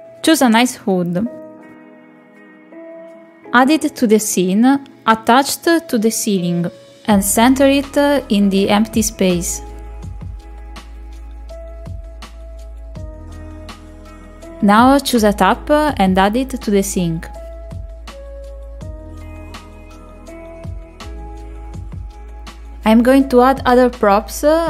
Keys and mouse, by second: 7.5 click, 8.7 click, 10.4 middle click, 11.1 shift+middle click, 11.7-12.9 drag, 13.1 click, 15.6-17.8 drag, 22.9 r, 24.5 middle click.